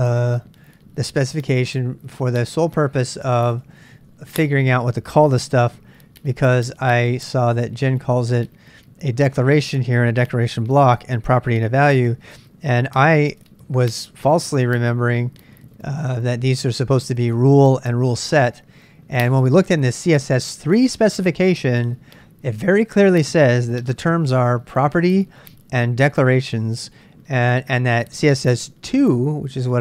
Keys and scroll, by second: 0.0-1.2 typing, 1.4 Return, 3.1-4.2 typing, 6.9 super+Tab, 8.0 super+Tab, 8.1 super+Tab.